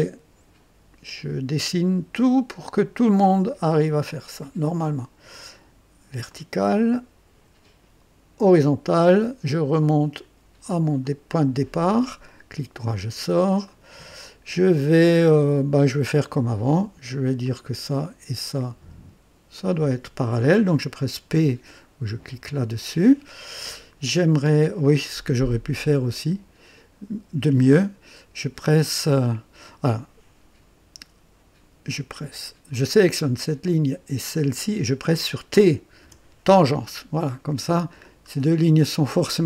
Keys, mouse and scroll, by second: 3.1 click, 6.2 click, 8.4 click, 11.0 click, 12.2 right click, 13.1-13.4 scroll up 1, 13.6 right click, 17.4 click, 19.5 click, 22.3 p, 25.7-26.9 drag, 32.7 click, 34.2 click, 36.0 t, 38.0-39.4 drag.